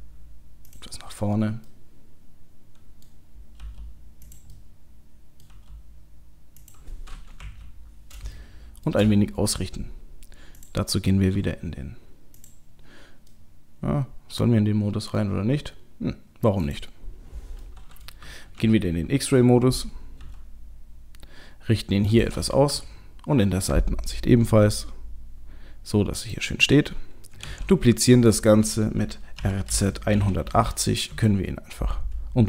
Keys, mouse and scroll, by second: 1.7 middle click, 3.6 g, 4.6 middle click, 4.8 middle click, 5.5 g, 7.4 KP_1, 7.9-8.4 scroll up 2, 8.4 shift+middle click, 10.6 click, 12.4 click, 13.3 middle click, 16.6 click, 17.6 middle click, 18.2 KP_3, 18.6 KP_1, 19.1-20.2 scroll up 1, 20.2-20.8 scroll up 1, 20.2 g, 22.7 KP_3, 24.5 g, 27.5 shift+d, 29.4 r.